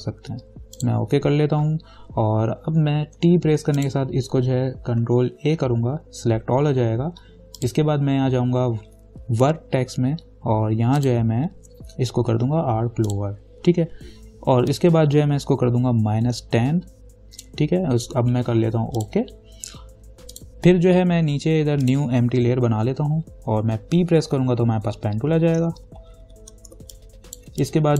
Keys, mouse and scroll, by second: 1.0 click, 3.4 t, 4.0 click, 5.6 ctrl+a, 7.8 click, 7.8 click, 11.2-19.2 drag, 24.5 p, 26.1 ctrl+=, 27.0 space, 27.1 click, 27.5 space.